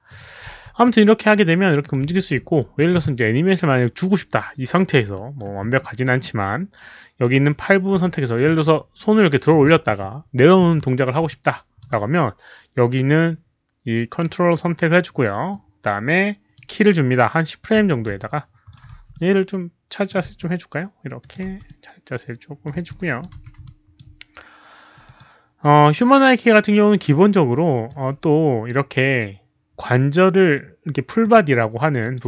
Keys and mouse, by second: 0.0 alt+click, 0.5 w, 0.8-1.9 middle drag, 0.8 alt+click, 1.6-2.4 typing, 1.9 alt+click, 2.5-2.9 alt+drag, 5.1 alt+middle drag, 7.3-8.0 typing, 7.5 alt+click, 7.5 alt+middle click, 8.0-8.4 alt+drag, 9.3-11.7 typing, 9.5 alt+click, 9.5 alt+middle click, 11.2 alt+click, 11.2 alt+middle click, 11.7 alt+middle click, 12.8 z, 13.4 alt+click, 13.4 alt+middle click, 15.5-16.5 alt+drag, 17.8 s, 18.1 alt+click, 18.9 w, 19.1-20.0 middle drag, 20.9-23.7 typing, 21.1 alt+click, 21.6-22.6 middle drag, 22.8-23.2 alt+drag, 23.2 middle click, 23.6-23.9 alt+drag, 25.0 alt+click, 27.0 alt+click, 29.6 click, 30.7-32.2 typing, 31.0 middle click, 31.1 click, 32.0 alt+click.